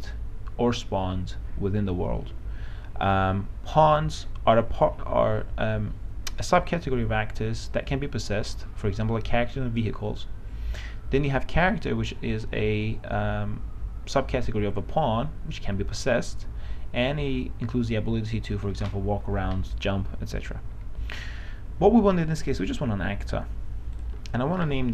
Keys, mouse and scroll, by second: 13.6 click.